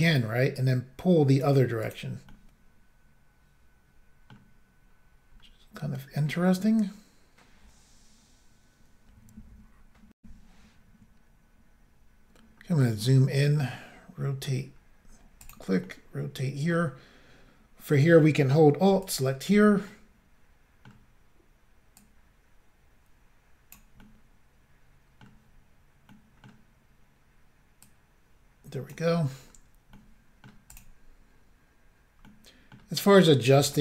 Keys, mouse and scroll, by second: 0.6 click, 1.8 click, 1.9 click, 2.3 middle click, 6.2-7.4 scroll down 1, 10.2 Insert, 12.7-13.7 scroll up 3, 13.7 middle click, 14.5 scroll up 1, 14.7-15.2 scroll down 2, 15.4 click, 15.5 click, 15.8 middle click, 16.8-17.1 scroll up 1, 17.4-17.9 scroll down 1, 19.0 alt+click, 19.1 alt+click, 19.9 middle click, 22.0 click, 24.0 middle click, 25.2 middle click, 25.3 scroll up 1, 26.1 middle click, 26.1 scroll down 1, 27.3 middle click, 27.3 scroll down 1, 27.9 click, 29.5-30.0 scroll down 2, 30.0 middle click, 30.7 click, 30.8 click, 31.8 scroll down 1, 32.3 middle click, 33.7 shift+middle click.